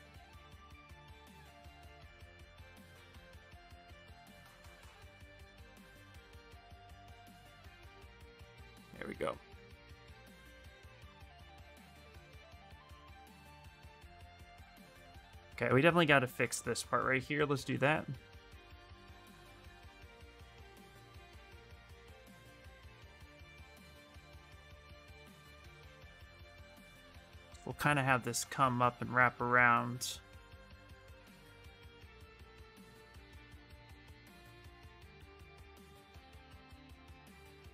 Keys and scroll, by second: 8.9 s, 16.8-17.9 typing, 19.2 s.